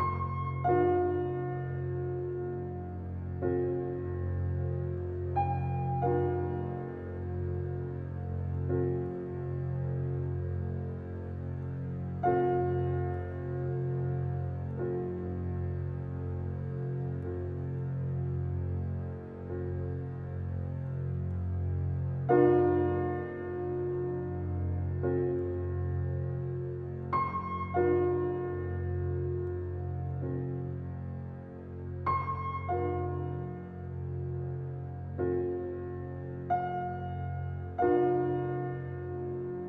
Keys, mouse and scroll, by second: 0.1-3.7 drag, 4.9 ctrl+alt+z, 7.4 alt+right click, 8.5 alt+click, 9.9-13.0 drag, 15.0 ctrl+alt+scroll down 1, 15.6 ctrl+alt+scroll down 1, 16.6 ctrl+alt+scroll down 1, 17.3 ctrl+alt+scroll down 1, 18.0 ctrl+alt+scroll down 1, 18.5 ctrl+alt+scroll down 1, 19.8 ctrl+alt+scroll down 1, 20.4 space, 20.6 click, 21.0 space, 21.4 ctrl+alt+scroll up 1, 22.4 ctrl+alt+scroll up 1, 23.5 ctrl+alt+scroll up 1, 24.2 ctrl+alt+scroll up 1, 24.5 space, 24.8 click, 25.0 space, 26.4 alt+right click, 27.4 alt+click, 28.0 click, 30.2 ctrl+alt+scroll down 1, 30.8 click, 31.5-33.0 alt+right drag, 33.0 alt+click, 33.4 click.